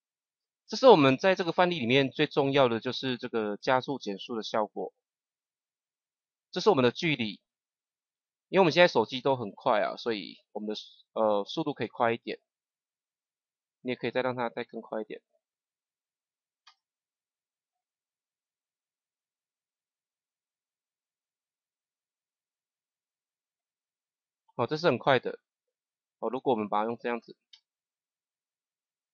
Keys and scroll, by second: 12.1 KP_0, 16.6 KP_0, 27.4 KP_0.